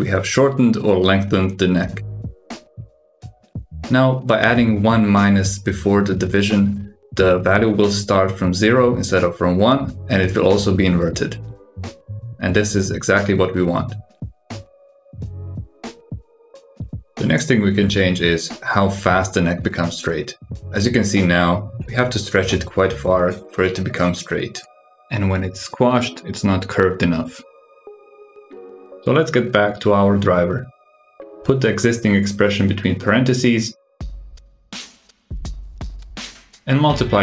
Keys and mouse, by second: 2.7 click, 4.4 drag, 4.8 alt+g, 6.0 click, 7.4-11.0 drag, 14.4 click, 14.7 click, 15.3 g, 18.2 click, 21.1 click, 21.5 g, 23.3-24.7 drag, 27.6 click, 28.2 alt+g, 29.2 click, 30.8-37.2 drag.